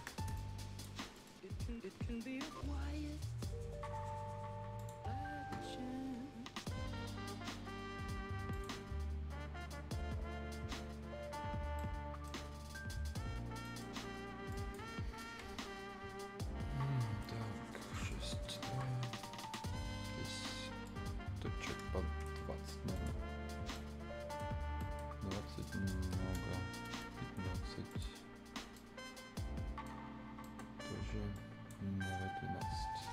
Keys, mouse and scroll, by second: 0.3 click, 1.0 scroll up 1, 1.1 middle click, 4.7 click, 8.5 click, 11.7 right click, 12.5-13.1 scroll up 1, 13.6 right click, 14.5 click, 18.1 click, 19.2-22.1 drag, 22.9 click, 23.4-23.7 scroll up 1, 23.7 right click, 24.5 scroll down 1, 24.7 middle click, 25.1-25.6 scroll up 1, 25.6 click, 27.9 click, 28.3 scroll up 1, 28.7 right click, 30.0 scroll down 1, 30.2 scroll up 1, 30.4 right click, 31.3-33.1 drag.